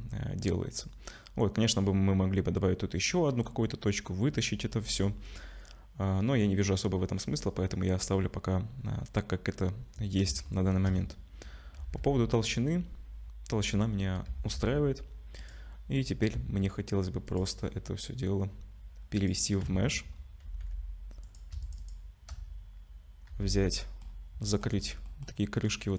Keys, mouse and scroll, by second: 6.8-9.9 scroll down 1, 10.5 shift+middle click, 11.1-11.4 scroll up 1, 11.8 z, 14.3 z, 15.4 click, 17.3 click, 19.6 Tab, 20.1 scroll up 3, 20.4 2, 21.2 click, 21.6 alt+shift+click, 23.3 f, 23.7 middle click, 24.0 scroll down 4, 24.4 middle click, 24.8 scroll up 2, 25.1 middle click.